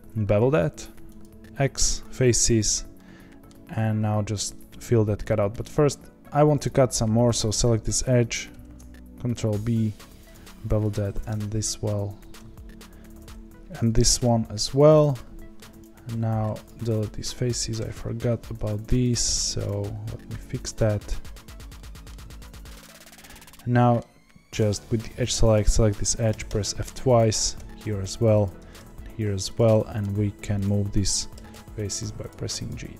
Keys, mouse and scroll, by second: 2.1 x, 2.9-6.2 middle drag, 6.2 click, 6.6 click, 7.3 click, 8.5 ctrl+b, 10.9 click, 11.0 ctrl+b, 14.0 ctrl+b, 16.6 x, 17.3 3, 17.5 click, 19.6 x, 20.7 click, 21.4 click, 21.7 middle click, 22.2 x, 22.9-24.5 middle drag, 24.5 2, 25.5 click, 26.3 f, 26.4 f, 27.1 click, 27.3 f, 27.5 f, 28.4 click, 28.5 f, 28.7 f, 29.1 1, 29.5 click, 29.7 middle click, 30.6 click, 31.3 g, 32.6 click, 32.8 g.